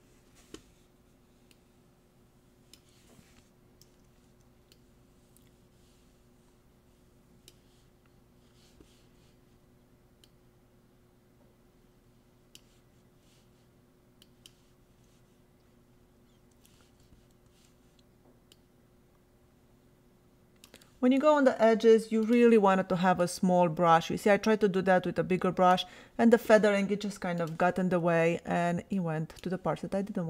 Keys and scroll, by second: 3.8 ], 16.5 [.